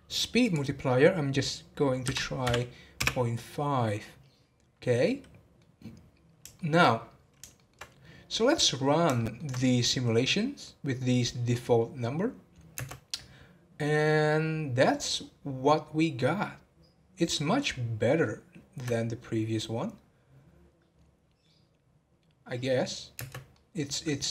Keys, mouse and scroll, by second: 0.4-3.5 drag, 5.0-7.0 middle drag, 7.0-7.5 scroll down 4, 7.5-8.0 shift+middle drag, 8.0-8.4 scroll up 2, 8.4-12.8 middle drag, 12.8 space, 23.3 space, 23.5-24.3 middle drag.